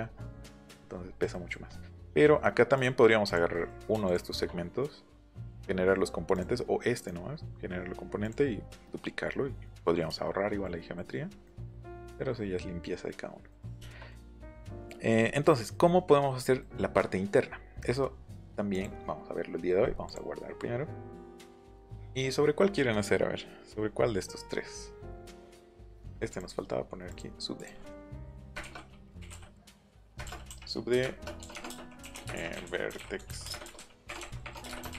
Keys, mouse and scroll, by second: 0.0-0.5 scroll up 2, 2.7 click, 3.2 click, 3.5 middle click, 4.0 shift+click, 5.2 right click, 6.3 click, 6.9 right click, 8.2 click, 9.3 middle click, 10.0 shift+middle click, 10.8-11.4 scroll down 2, 10.9 middle click, 11.4 middle click, 11.9 middle click, 15.4 middle click, 15.6 middle click, 16.4 middle click, 16.8 middle click, 18.6 click, 20.0 click, 21.0 middle click, 21.6 middle click, 25.0 middle click, 25.2 scroll up 1, 25.2 scroll down 1, 25.3 middle click, 26.3 click, 27.0 click, 27.5 click, 28.5-34.9 typing.